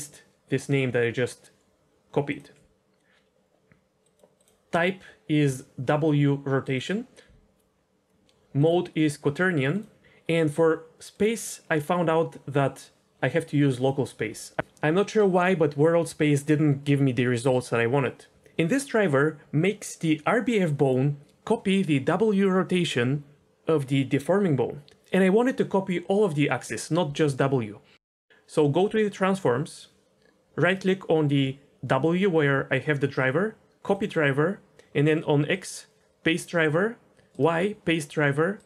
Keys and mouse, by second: 30.7-34.0 right drag, 35.6 right click, 37.2 right click.